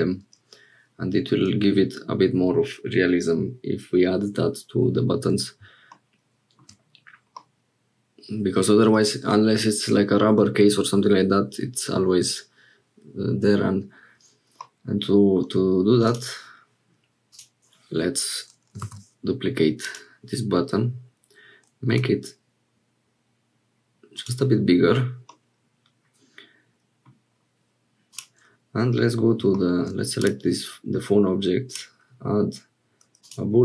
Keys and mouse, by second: 7.3-8.6 drag, 14.6 click, 18.8 shift+d, 21.9 s, 25.3-27.1 drag, 29.7 shift+click, 30.2-33.3 drag.